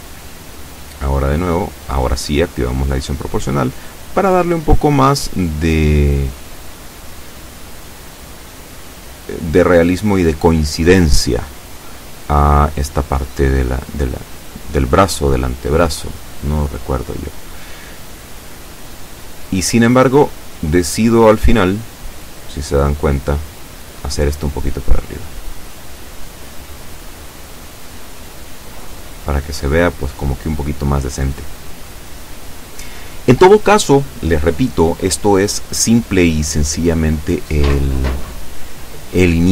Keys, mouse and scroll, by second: 0.8 scroll down 1, 4.8 click, 5.2-5.9 scroll down 2, 5.9-6.3 scroll up 2, 6.3 scroll down 1, 7.4-8.3 scroll up 3, 8.6-9.1 scroll down 1, 9.6-10.0 scroll up 1, 10.4-11.0 scroll up 2, 13.7-14.1 scroll down 2, 14.2-16.3 drag, 16.5 shift+click, 17.6 a, 18.0 b, 18.6-19.7 drag, 21.4 shift+right click, 21.8-23.2 shift+middle drag, 23.7-26.7 drag, 26.7-27.9 middle drag, 28.2 Caps_Lock, 29.2 Tab, 29.2-31.7 middle drag, 32.3 Tab, 32.9 shift+middle click, 33.5-33.9 shift+scroll up 3, 34.1 shift+middle click, 35.0 shift+right click, 35.7 shift+right click, 36.6 right click, 37.3 shift+right click, 37.9 shift+scroll down 3, 38.3 middle click.